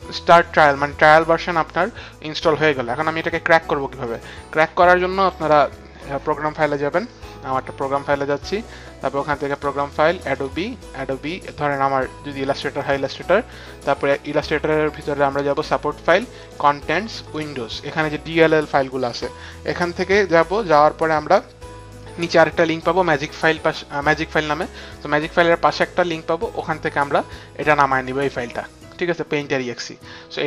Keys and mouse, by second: 1.6 click, 4.2 click, 5.4 click, 8.5 click, 9.5 click, 10.3 click, 12.9 click, 13.0 click, 15.6 click, 16.5 click, 20.0 click, 21.2 click, 22.2 click, 25.0 click.